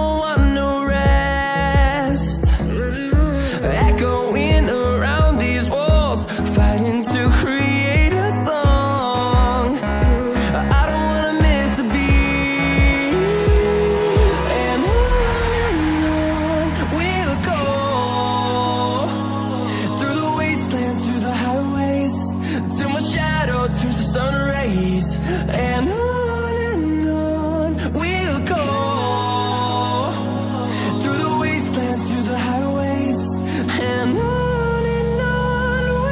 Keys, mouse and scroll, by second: 2.4 click, 2.5 double click, 3.0 Right, 3.2 space, 4.5-5.3 typing, 6.7 Return, 7.7-8.8 typing, 9.9-11.2 typing, 11.6 Return, 12.3-14.3 typing, 15.0 click, 19.6-20.0 scroll down 1, 20.0 scroll up 1, 20.8-22.1 scroll down 1, 22.1 click, 25.2 scroll up 1, 26.1 click, 28.4 double click, 29.3 click, 30.3 scroll down 1, 31.8 scroll up 1, 34.6-35.1 scroll down 1, 35.1 click.